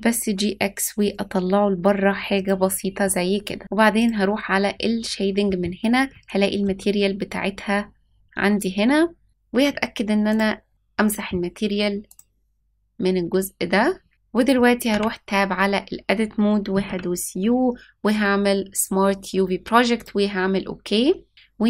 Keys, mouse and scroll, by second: 2.9-3.6 middle drag.